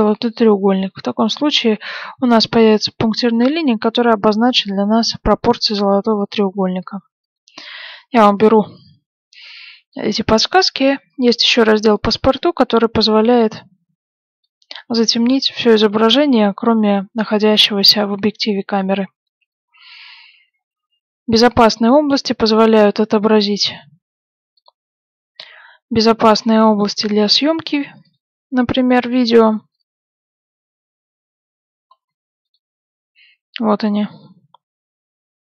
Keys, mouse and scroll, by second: 6.1 click, 12.1-15.0 drag, 15.1 click, 19.3 click, 20.4 middle click, 21.4 click, 23.4 click, 26.1-29.0 middle drag, 28.0 click, 31.6-33.7 middle drag, 32.4 click.